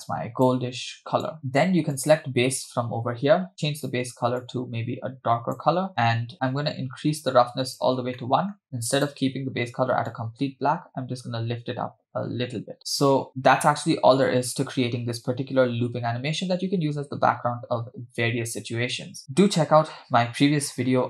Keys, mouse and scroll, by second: 1.4 scroll down 1, 2.0 click, 3.5 click, 5.9 middle click, 6.3-7.8 drag, 8.2 middle click, 8.9 click, 19.0 space.